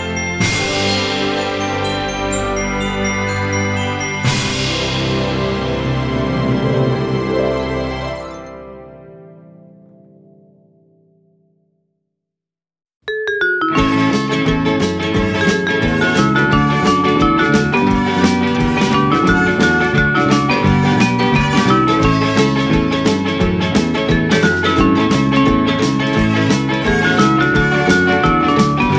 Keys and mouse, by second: 0.3 g, 0.6 x, 2.2 click, 2.5 g, 3.0 y, 3.7 click, 4.2 Tab, 5.0 f, 8.3 click, 8.9 middle click, 10.2 g, 10.6 z, 11.1 click, 11.3 middle click, 12.9 Tab, 15.9 click, 17.1 click, 19.5 click, 20.7 middle click, 24.7 F6, 26.6 Tab, 27.3 alt+z, 27.8 click.